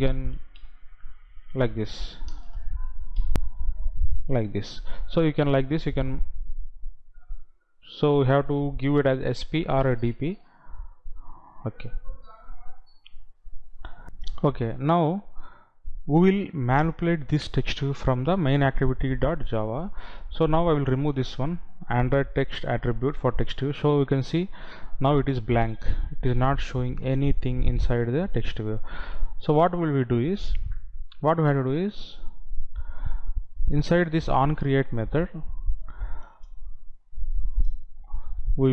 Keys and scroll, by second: 14.2 F9, 23.0 Delete.